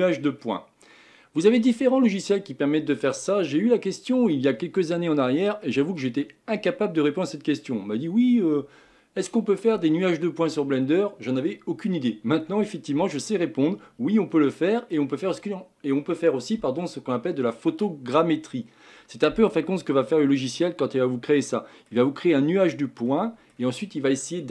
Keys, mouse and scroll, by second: 0.4 scroll up 1, 0.4-3.5 middle drag, 19.7-20.8 middle drag, 20.8 scroll down 2, 21.5-24.5 middle drag.